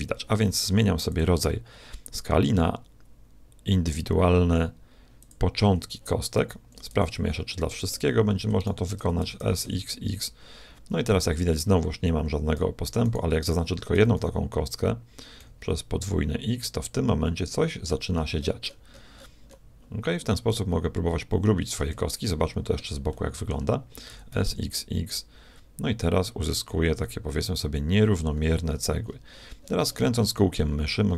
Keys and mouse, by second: 1.1-2.9 drag, 6.4 a, 6.9 b, 8.6 shift+click, 9.2 shift+s, 9.4-10.5 right drag, 13.1-14.9 right drag, 14.0 s, 22.3-24.9 middle drag, 24.1 s.